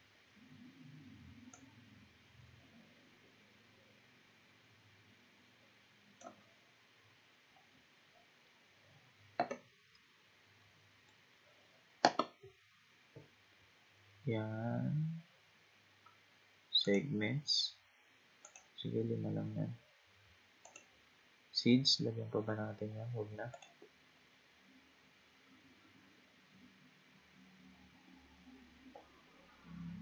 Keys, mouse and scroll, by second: 1.6-4.6 drag, 10.0-13.0 middle drag, 13.8-14.4 scroll down 1, 14.4-14.7 scroll down 2, 14.7-16.8 scroll up 4, 16.8-19.1 drag, 19.1-20.7 scroll up 2, 20.7-23.7 drag, 23.8-24.6 scroll down 5, 24.6-25.4 scroll down 4, 25.4-25.9 scroll down 1, 25.9-26.3 scroll down 4, 27.0-30.0 scroll down 3.